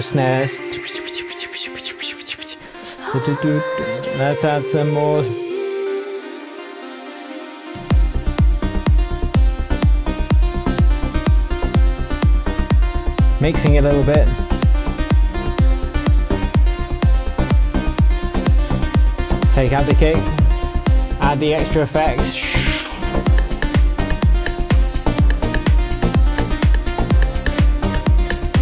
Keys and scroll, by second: 7.7 super+z.